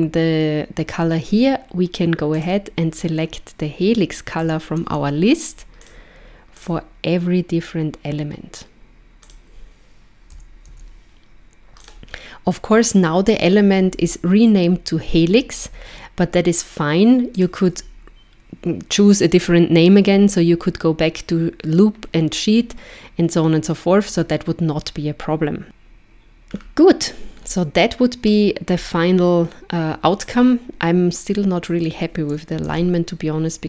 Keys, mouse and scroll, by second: 2.4 click, 6.6 click, 9.3 click, 17.4 click, 26.5-27.3 scroll down 2, 27.3 scroll down 1, 28.7-29.0 scroll up 1, 30.2 click, 31.7 click.